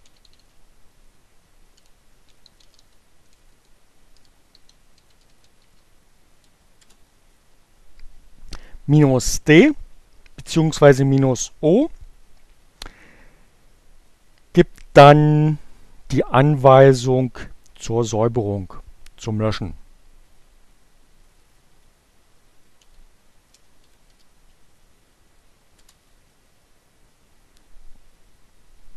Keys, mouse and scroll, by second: 0.0-5.3 typing, 17.3 Up, 19.9 Left, 21.2 Delete, 22.1-23.7 typing, 25.1 Return.